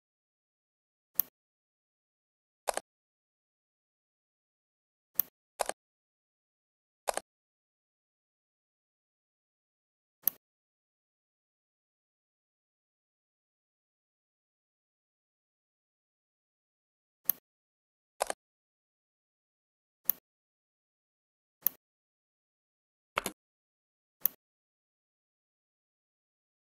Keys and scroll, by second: 23.1 space.